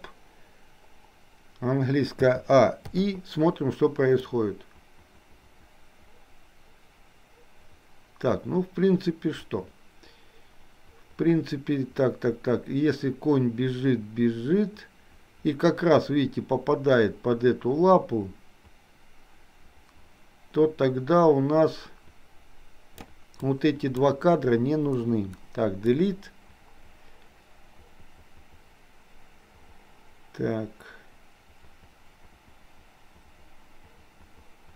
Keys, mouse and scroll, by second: 2.2 a, 3.0 i, 4.4-23.1 drag, 23.4 click, 25.1 Delete, 26.1-34.7 drag.